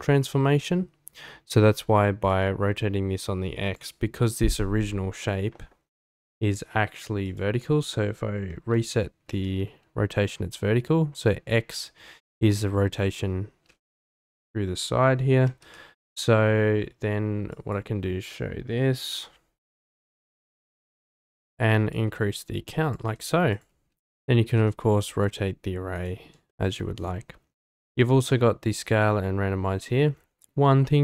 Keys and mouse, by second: 2.3-3.9 drag, 5.2 click, 7.2-8.8 drag, 9.3 alt+r, 15.6 ctrl+z, 21.9-22.9 shift+drag, 23.5 click, 24.0 click, 24.4 r, 24.6 z, 26.5 shift+middle click.